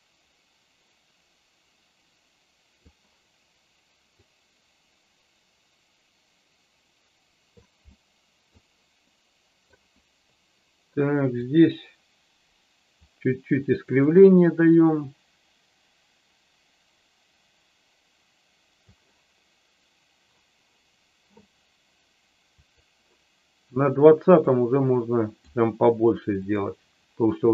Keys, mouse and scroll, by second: 4.1-7.6 drag, 7.8 middle click, 9.1 middle click, 11.5-12.9 drag, 13.8 click, 14.9-18.9 drag, 22.6 click, 24.3-25.3 drag.